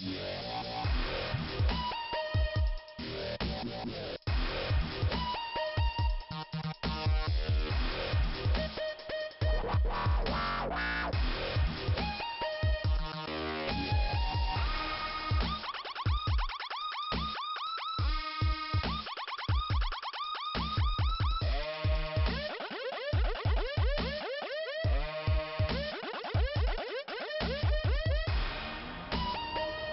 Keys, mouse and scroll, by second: 0.5 scroll down 2, 1.6-2.7 scroll up 2, 3.3 click, 5.1 click, 8.7 click, 10.3 click, 11.8 click, 14.2 click, 14.9 click, 16.3 click, 16.9 click, 20.0 click, 22.2 click, 22.3 click, 24.8 click, 25.6 Delete, 26.6 click, 27.6 click, 28.0 Delete, 28.4 click.